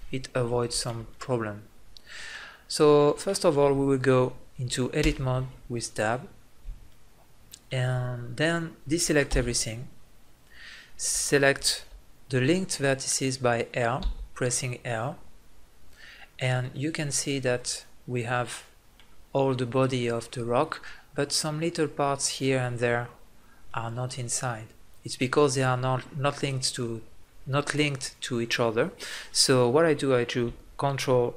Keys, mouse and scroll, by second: 1.3 middle click, 5.9 Tab, 9.5 a, 14.6 l, 23.4-24.9 middle drag.